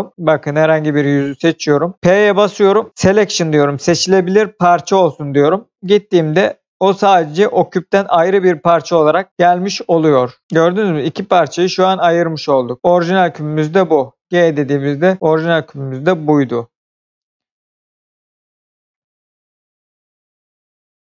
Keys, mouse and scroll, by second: 0.8 click, 1.5 middle click, 2.1 p, 4.5 click, 5.7 Tab, 6.3 click, 7.0 middle click, 8.6 g, 9.3 Escape, 9.7 middle click, 10.4 Escape, 10.8 click, 13.8 g, 15.0 click, 15.2 middle click.